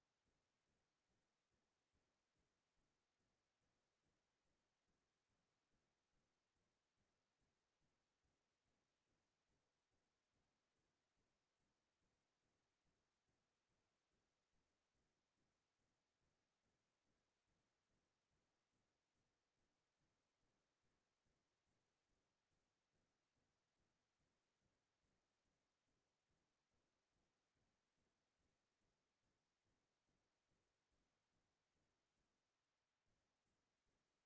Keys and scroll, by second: 4.3 ctrl+space, 5.6 ctrl+t, 11.6 Return, 13.6 ctrl+space, 14.8 ctrl+space, 17.0 ctrl+space, 28.1 ctrl+l.